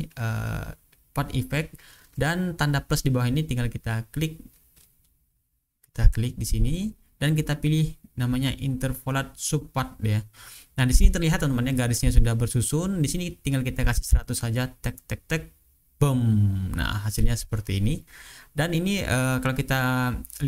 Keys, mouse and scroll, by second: 0.5 click, 5.2 click, 9.0 click, 10.7-11.8 ctrl+scroll up 2, 12.8 click, 14.6 KP_1, 14.8 KP_0, 15.8 Return, 17.5-17.9 ctrl+scroll up 2, 17.9-19.2 ctrl+scroll down 2.